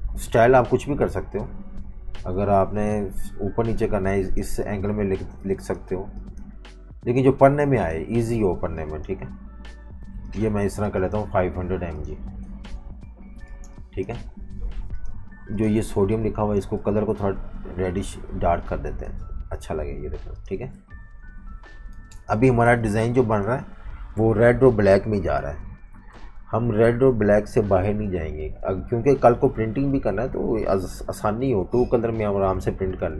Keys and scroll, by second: 10.7 v, 10.8 space, 12.7 super+-, 12.9 super+-, 13.5 typing, 15.9-16.8 typing, 19.8 v, 21.0 super+-, 21.2 super+-, 22.0-23.6 typing, 26.1 F18.